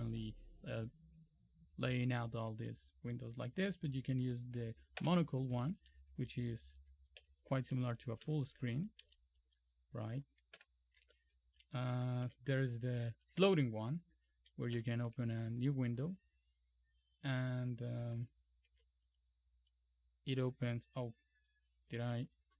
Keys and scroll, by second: 5.1 super+m, 7.3 shift+super+-, 8.3 super+Up, 9.1 super+Down, 10.6 shift+super+=, 12.3 super+t, 13.5 super+f, 14.8 super+t, 18.8 super+e.